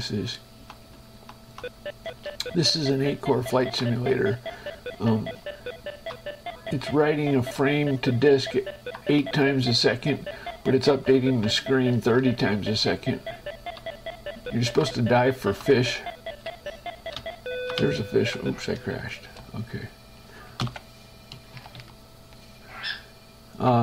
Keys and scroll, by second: 2.7 space, 3.7 Up, 4.1 Right, 5.3 Down, 6.5 Left, 8.5 Up, 9.5 Down, 10.5 Right, 11.7 Down, 12.5 Left, 14.7 Up, 15.2 Right, 15.8 Up, 17.5 Down, 18.0 Up, 19.3 shift+Escape, 21.8 Page_Down.